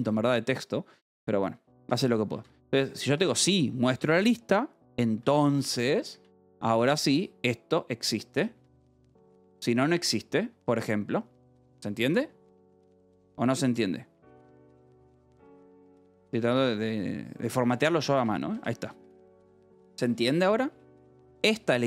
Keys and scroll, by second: 1.4-10.4 typing, 3.9 Escape, 6.1 Return, 6.3 Escape, 13.6 ., 14.7 ., 15.0 Escape, 15.2 k, 16.2 k, 17.3-21.5 typing, 17.5 Escape, 18.2 Escape.